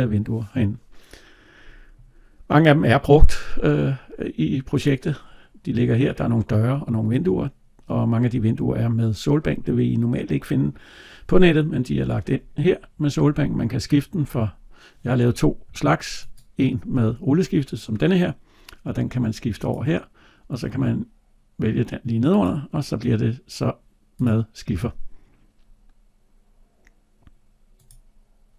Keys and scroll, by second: 15.5 Tab.